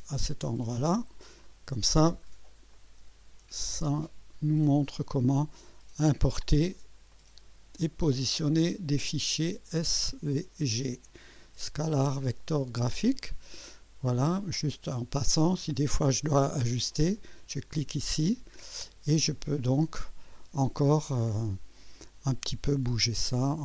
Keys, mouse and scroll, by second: 1.4-2.1 right drag, 2.3 scroll up 1, 2.7-3.4 right drag, 4.5-6.2 drag, 6.8 scroll up 1, 7.1 right click, 8.7-11.2 drag, 11.4 scroll up 1, 11.9-13.3 right drag, 14.5 click, 17.2 click, 17.9 click, 23.1 scroll down 1.